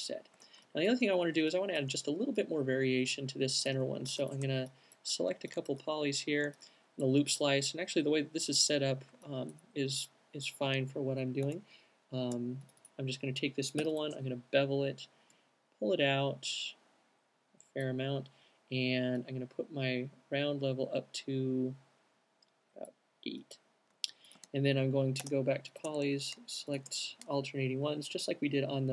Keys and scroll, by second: 10.8 alt+q, 11.6 space, 12.3 space, 13.2 b, 24.4 alt+q, 25.3 space, 27.8 Up, 27.9 Up, 28.2 Up, 28.4 Up, 28.7 Up.